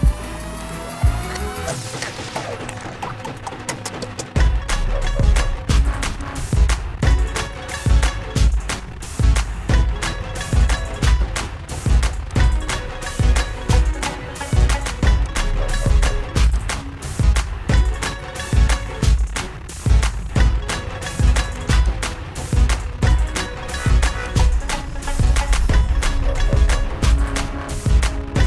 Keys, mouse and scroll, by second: 0.1 click, 1.4 click, 3.1 click, 6.6 click, 9.6 click, 14.1 click, 15.1 click, 15.6 click, 17.3 click, 18.0 click, 19.1 alt+click, 22.4-23.2 scroll, 23.4 click, 24.9-25.2 scroll, 26.0 alt+click, 28.0 click.